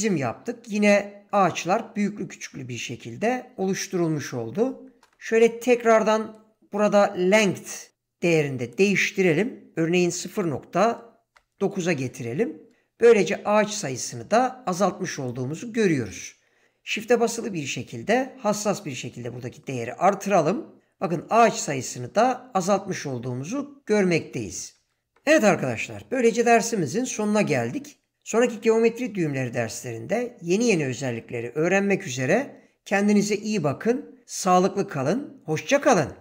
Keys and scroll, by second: 5.0 ctrl+space, 10.0 ., 10.7 9, 11.3 Return.